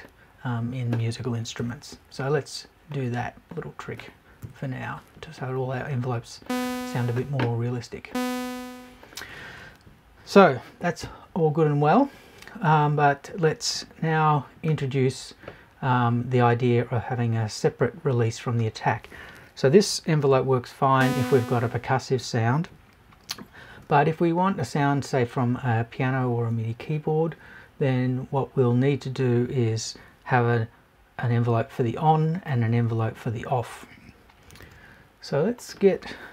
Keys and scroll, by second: 1.6 Right, 4.4 Left.